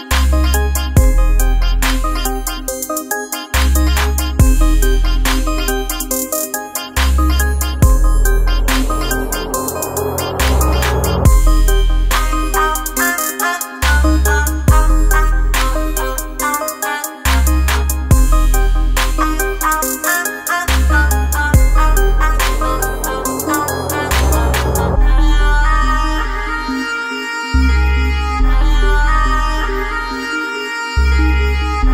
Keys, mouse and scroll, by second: 0.6 space, 0.9 click, 1.3 space, 1.6 click, 1.8 space, 2.4 ctrl+click, 19.9 space, 20.0 click, 20.5 space, 21.5 alt+scroll down 1, 21.8 space, 22.0 click, 22.4 space, 22.5 ctrl+click, 24.1 ctrl+space, 24.3 ctrl+click, 24.6 ctrl+space, 24.9 click, 25.3 space, 28.4 click.